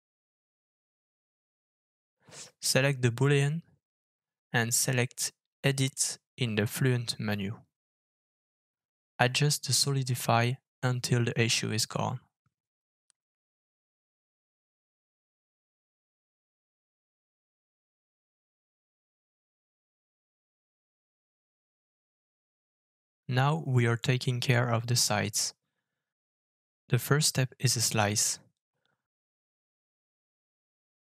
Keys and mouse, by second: 1.0 shift+middle drag, 3.0-3.5 middle drag, 3.9 click, 5.0 click, 5.4 click, 6.2 click, 7.5 alt+f, 20.7-22.4 middle drag, 23.6-24.0 shift+middle drag, 24.1-24.9 middle drag, 25.2-25.8 shift+middle drag, 26.1 click, 27.4 alt+f, 30.2-31.1 middle drag.